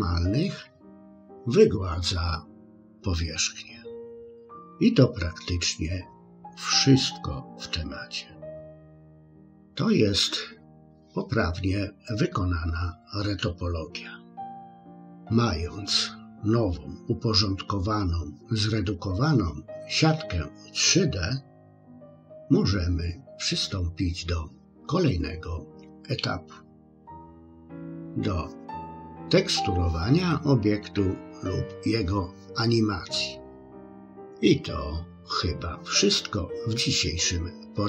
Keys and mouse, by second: 8.7 click.